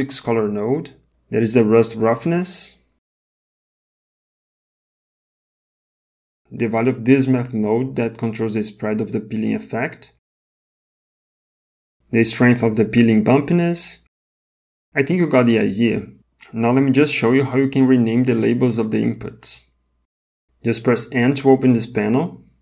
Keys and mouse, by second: 0.4 click, 0.7-2.2 drag, 3.7 middle click, 5.9 middle click, 8.2 click, 8.4-9.9 drag, 12.4-13.1 drag, 14.2-15.5 drag, 16.8 middle click, 17.7 middle click, 21.2 n.